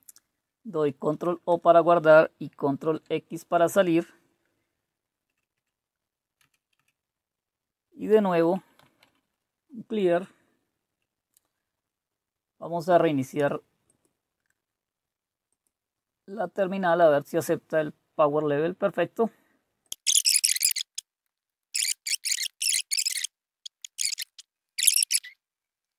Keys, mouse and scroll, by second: 0.6 ctrl+o, 1.5 Return, 2.8 ctrl+x, 5.3 Up, 5.5 Up, 6.4 Down, 6.7 Down, 7.8-9.5 typing, 13.8 click, 15.5 click, 19.8 click, 20.7-24.6 typing, 24.5 click, 24.8 click, 24.9-25.3 scroll down 2, 25.3 scroll up 2, 25.5-25.9 scroll down 2.